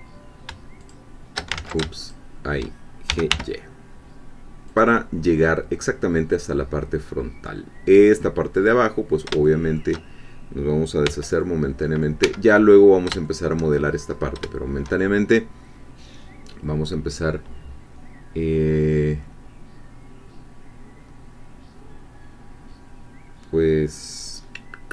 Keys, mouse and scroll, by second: 0.8 shift+click, 1.5 ctrl+shift+z, 2.1 ctrl+shift+click, 2.8-3.8 typing, 4.7 click, 5.3-5.6 scroll down 2, 6.1-7.2 scroll down 2, 7.2 scroll up 2, 9.4 shift+click, 11.1 c, 11.4 click, 12.2 Escape, 13.2 shift+click, 14.1 scroll up 2.